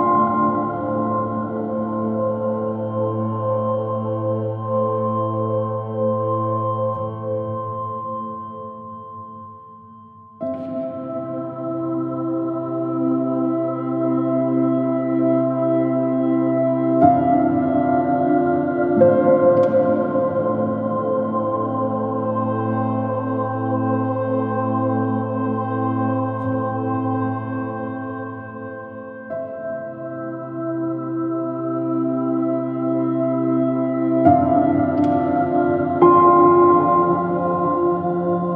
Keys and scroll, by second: 6.9 BackSpace, 8.6 space, 10.0 space, 14.0 space, 15.8 space, 21.0 space, 23.4 space.